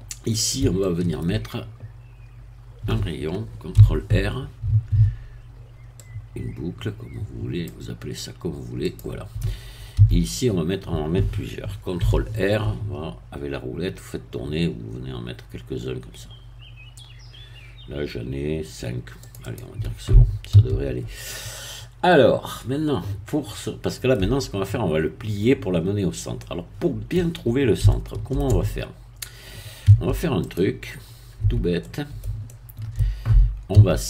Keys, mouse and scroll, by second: 0.0 shift+scroll up 1, 0.3 shift+middle click, 1.1 shift+middle click, 3.7 ctrl+r, 6.0-7.8 drag, 8.9 click, 10.0 a, 12.0 ctrl+r, 13.1-13.5 scroll up 2, 14.3-19.1 scroll up 2, 19.1 scroll up 1, 19.2 click, 20.5 a, 21.0 scroll down 2, 21.6-24.2 middle drag, 24.2 scroll down 2, 26.0-26.3 scroll up 2, 26.4 middle click, 27.9 shift+middle click, 29.8 Tab, 30.4 click, 31.0-31.4 scroll up 2, 31.4 Tab, 31.8-33.4 middle drag, 33.7 a.